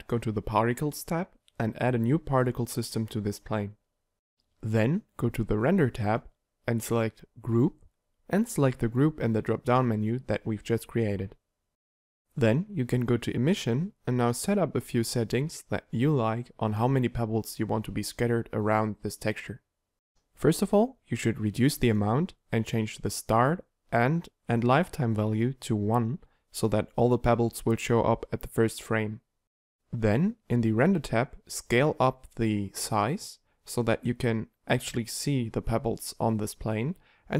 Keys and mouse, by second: 2.5-11.3 drag, 11.3 middle click, 12.2-20.2 drag, 20.2 middle click, 20.6-23.2 drag, 23.2 middle click, 23.8-29.8 drag, 29.8 middle click, 30.2-31.9 drag, 32.3 middle click, 32.8-34.4 drag, 34.6 alt+a, 35.1 Escape, 37.0 middle click.